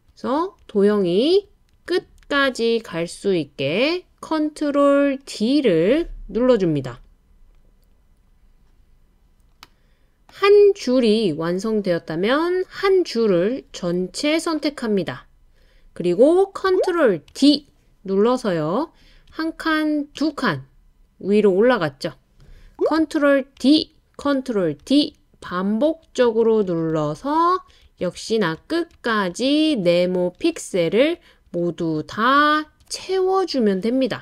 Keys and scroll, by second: 17.3 super+d, 20.2 Up, 23.6 super+d, 24.8 super+d, 25.9 super+d, 26.2 super+d, 26.6 super+d.